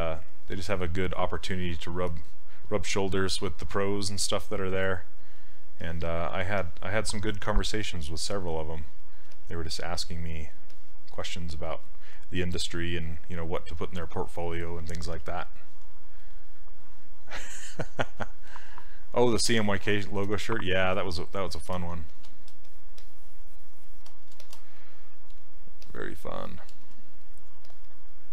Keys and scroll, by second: 9.3 s, 15.1 s.